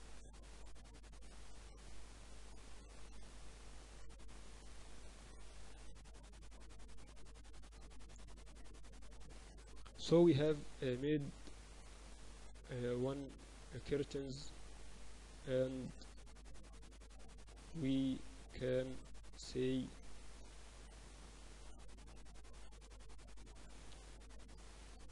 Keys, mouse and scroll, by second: 0.9 Tab, 1.3 Tab, 1.8 Tab, 2.6 Tab, 3.6 a, 4.4-6.1 right drag, 5.5 e, 7.1 Tab, 9.7 KP_4, 9.9 KP_4, 16.0 Tab, 16.2 Tab, 16.8 Tab, 17.1 Tab, 17.5 Tab, 23.3 Tab.